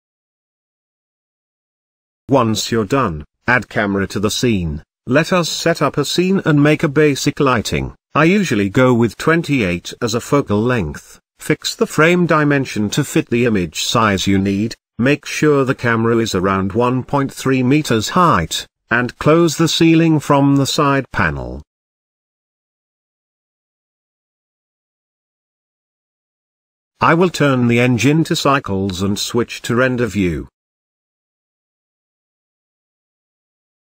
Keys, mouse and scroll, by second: 0.4-0.8 scroll down 1, 0.8-1.4 scroll up 1, 1.4 KP_1, 2.0-2.9 middle drag, 2.9 shift+a, 4.4 ctrl+alt+KP_0, 5.2 g, 7.2 click, 7.7-9.5 drag, 10.1 click, 10.6 click, 11.4 KP_0, 11.9 click, 12.5 KP_0, 14.3 g, 19.3 click, 20.3-22.1 drag, 23.1 click, 23.7 n, 25.2 click, 25.8 n, 27.4 click, 27.7-30.5 drag, 30.8 click, 32.1 z.